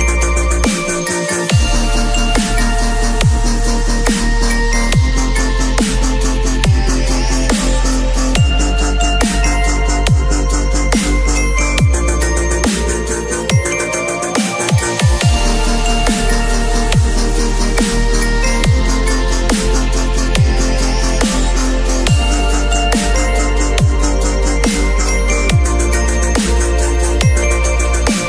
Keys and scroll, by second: 1.9 Return, 2.7 ctrl+u, 5.8 Return, 6.5 space, 7.0 ctrl+a, 7.2 ctrl+c, 7.5 ctrl+w, 11.3 ctrl+shift+v, 11.6 ctrl+t.